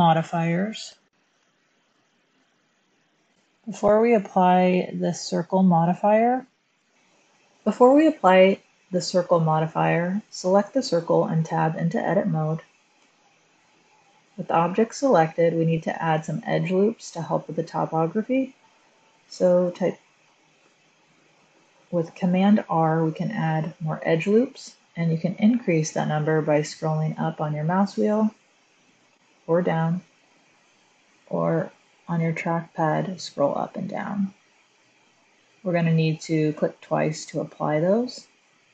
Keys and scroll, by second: 5.4 super+z, 11.3 Tab, 12.8 a, 22.0 super+r.